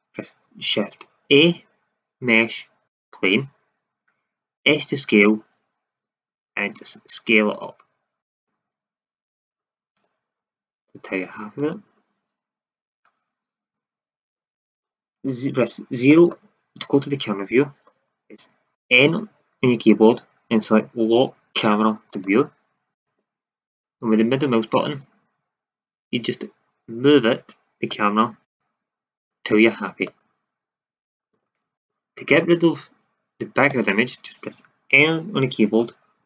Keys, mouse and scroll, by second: 1.2 shift+a, 4.5 s, 8.3-10.3 drag, 10.3 s, 11.6 click, 16.0 KP_0, 18.7 n, 22.9 n, 23.6-24.4 middle drag, 33.6 n.